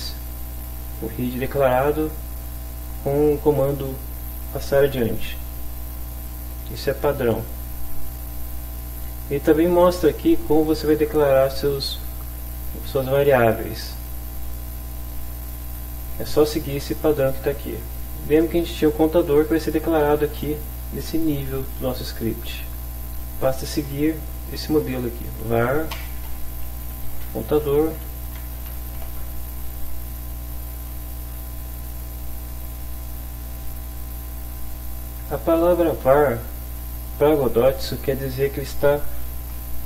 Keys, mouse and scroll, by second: 0.6 click, 3.2 click, 6.2 click, 8.0 click, 15.4 click, 17.0 click, 17.6 click, 24.7 Return, 25.4-29.0 typing, 30.4 Down, 33.0 click, 33.6 click, 35.4 click.